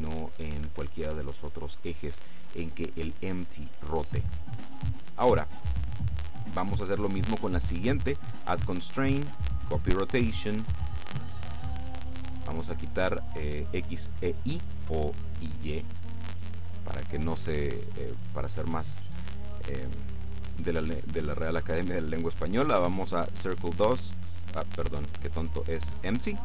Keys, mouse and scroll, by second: 0.7 Escape, 4.7 right click, 8.4 click, 9.8 click, 11.2 click, 12.0 click, 20.6 click, 24.0 click, 24.9 click, 26.3 click.